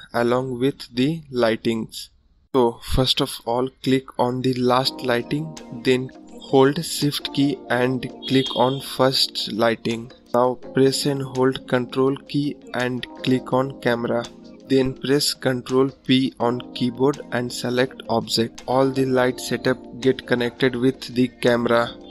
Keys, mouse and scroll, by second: 11.2 ctrl+click, 15.2 ctrl+p, 15.8 click, 21.2-22.1 drag.